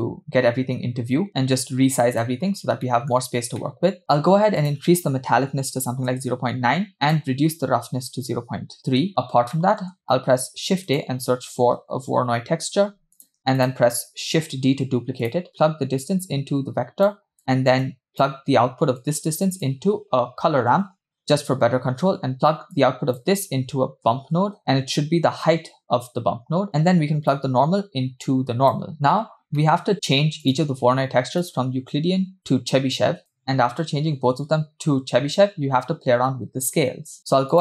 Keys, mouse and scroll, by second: 0.8-2.3 scroll up 3, 2.3 click, 2.5-2.8 scroll up 2, 2.8 middle click, 3.2-3.6 scroll up 1, 3.7 middle click, 4.7-6.3 drag, 7.2-9.1 drag, 9.6 middle click, 10.2 shift+a, 13.7 click, 14.6 shift+d, 16.1-17.1 drag, 17.4 click, 17.8 click, 19.0-21.2 drag, 22.8-26.7 drag, 27.3-28.9 drag, 28.9 middle click, 29.1-29.6 scroll up 2, 29.7 middle click, 29.9-30.4 scroll up 1, 30.5 drag, 31.4-32.8 drag, 33.2 click, 37.5-37.6 drag.